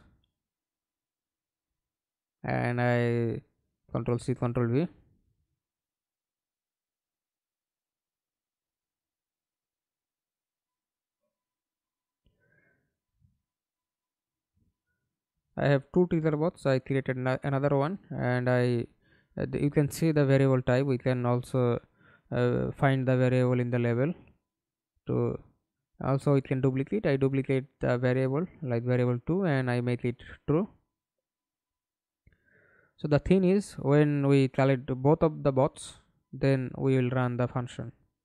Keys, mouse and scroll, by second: 2.1 right click, 2.5 ctrl+c, 3.4 ctrl+v, 8.2 right click, 10.7 right click, 19.5 right click, 21.2 right click, 23.9 Right, 24.3 BackSpace, 25.0 2, 25.3 Return, 30.6 right click, 31.3-31.6 scroll down 1, 31.6 right click, 34.3 double click, 35.8 right click, 36.2-37.0 scroll up 1, 37.0-38.2 scroll up 2.